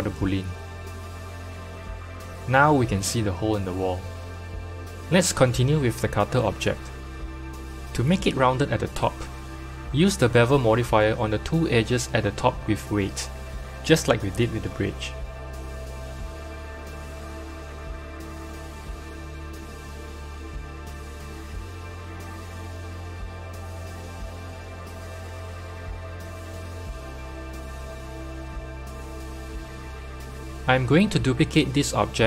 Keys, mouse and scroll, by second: 2.4 g, 4.7 KP_1, 5.9-7.6 middle drag, 7.6-10.7 drag, 11.5 Tab, 12.0 middle click, 12.7 2, 13.1 click, 13.6-15.7 scroll up 2, 15.7-18.7 drag, 20.0-22.7 drag, 22.7-25.0 middle drag, 25.0-28.0 shift+drag, 28.5 Tab, 29.4 click, 30.2-32.2 middle drag.